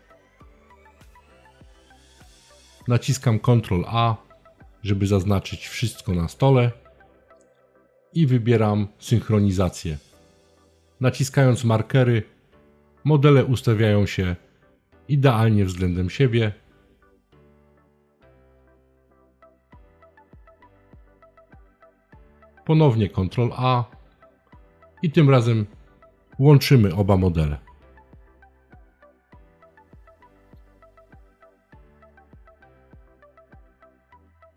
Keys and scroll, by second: 1.9 super+a, 21.4 super+a.